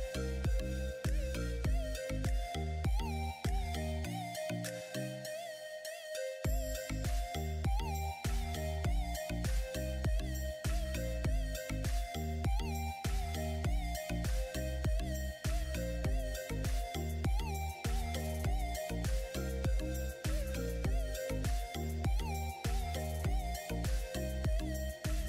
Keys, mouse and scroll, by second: 0.1 click, 2.7 click, 4.4 alt+Num_Lock, 4.7-5.8 alt+drag, 9.5-12.7 drag, 12.7-14.9 drag, 14.9-16.2 drag, 16.5 click, 16.8 click, 16.9 right click, 17.2 click, 17.5 click, 17.7 ctrl+z, 17.8-18.9 drag, 18.9 right click, 19.2 click, 19.9 click, 20.1 shift+click, 20.3 ctrl+z, 20.4-25.2 drag.